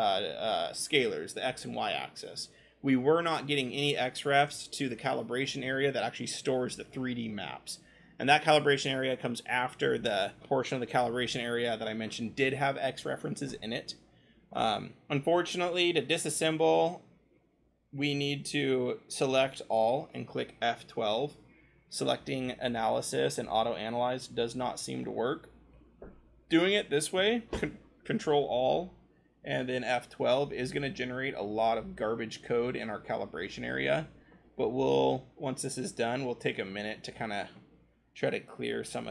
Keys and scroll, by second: 20.5 ctrl+F12, 38.3 ctrl+scroll.